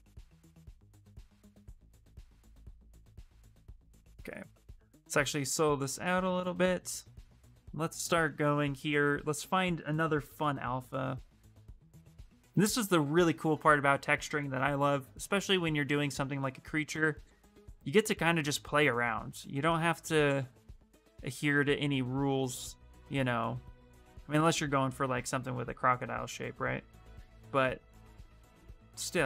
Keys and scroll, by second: 2.7 ctrl+z, 7.5 space.